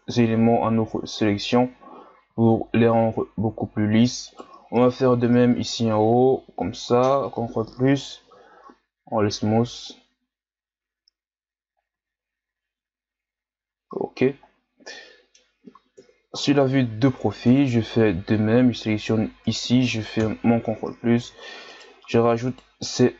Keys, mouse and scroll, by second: 0.0 Tab, 1.2-2.5 shift+scroll up 1, 2.5-3.4 shift+scroll up 6, 3.4 Tab, 4.3 right click, 5.1 ctrl+KP_Add, 5.5 ctrl+KP_Add, 7.1 ctrl+KP_Add, 8.2 w, 10.9 Tab, 11.9 a, 12.2-13.2 scroll down 2, 13.2-14.3 scroll up 2, 14.3 scroll up 1, 14.5-14.9 scroll down 2, 14.9-16.0 middle drag, 16.0 KP_3, 16.8-17.5 ctrl+scroll up 4, 17.5 Tab, 19.4 right click, 20.2 ctrl+KP_Add, 21.7 shift+right click, 22.5 shift+right click.